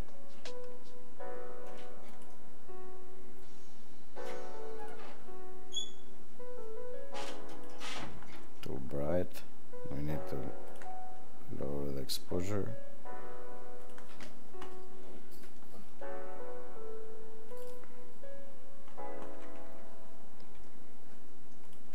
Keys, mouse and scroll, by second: 4.8 click, 10.6 click, 21.6 click.